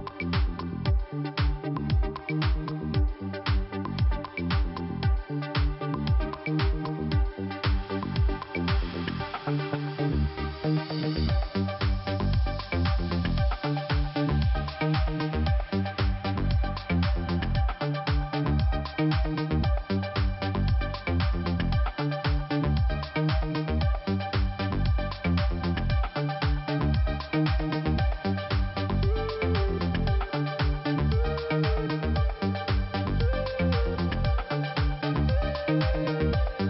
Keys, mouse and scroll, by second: 2.0 middle click, 3.6 click, 6.7 click, 6.7 click, 12.6 click, 12.7 click, 13.7 click, 14.8 click, 15.9 click, 17.0 click, 18.6 click, 19.6 click, 21.1 click, 22.9 click, 23.1-23.5 scroll up 2, 23.6 click, 25.1 click, 26.1 click, 29.8 click, 32.4 scroll down 2, 34.2 scroll up 1, 35.1 scroll down 1, 36.0 middle click.